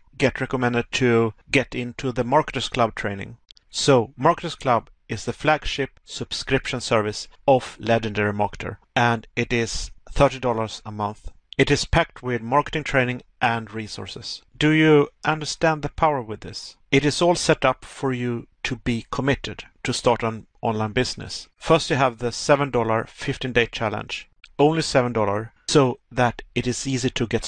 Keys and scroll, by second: 10.4 Pause, 12.8 Pause.